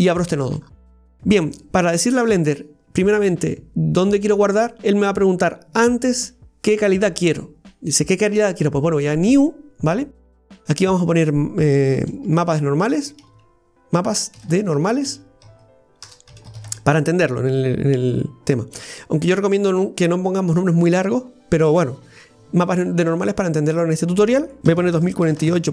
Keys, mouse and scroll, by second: 24.3-25.7 drag.